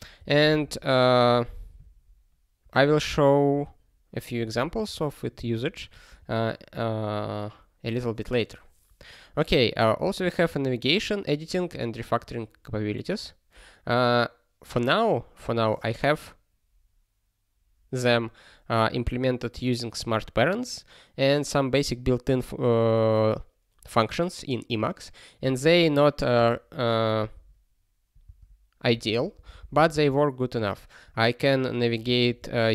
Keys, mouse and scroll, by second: 0.1 ctrl+g, 2.8 ctrl+g, 4.5 ctrl+a, 4.7 ctrl+space, 4.8 ctrl+n, 5.3 ctrl+p, 10.0 ctrl+n, 10.2 ctrl+space, 10.4 ctrl+n, 11.5 ctrl+p, 25.6 ctrl+e, 26.3 ctrl+g, 27.2 ctrl+b, 28.2 ctrl+space, 29.0 ctrl+g, 29.4 alt+b, 29.6 alt+b, 29.7 alt+b, 29.9 alt+b, 32.2 ctrl+alt+f, 32.3 ctrl+alt+f.